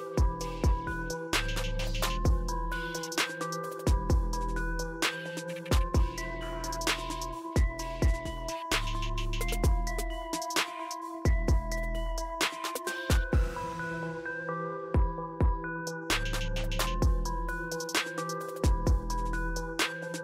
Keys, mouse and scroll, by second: 2.2-3.1 drag, 12.6 click, 18.1-19.3 drag.